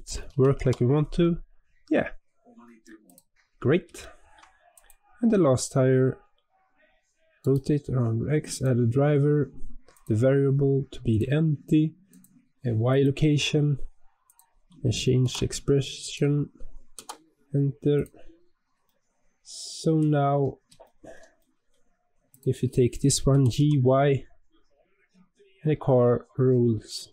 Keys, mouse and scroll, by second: 0.2 g, 3.3-3.9 scroll up 3, 3.9-4.6 shift+middle drag, 4.6 click, 7.3-17.9 right drag, 17.9 click, 18.1 scroll down 4, 18.8-22.2 middle drag, 22.2 click, 23.2 g.